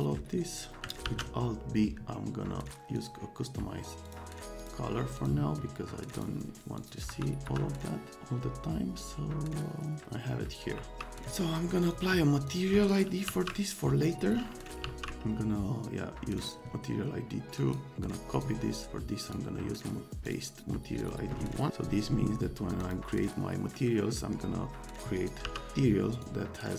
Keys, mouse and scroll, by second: 0.0 click, 1.1 alt+c, 3.0 click, 4.0 click, 4.6 click, 5.2 click, 6.2 click, 6.8 click, 7.1 F3, 7.5 F3, 10.8 alt+w, 11.8 click, 12.5 click, 13.0-15.4 typing, 16.3 click, 17.5 right click, 18.3 click, 18.8 click, 19.2 right click, 20.2 click, 21.0 click, 22.8 click, 25.1 click, 25.4 c, 25.7 click.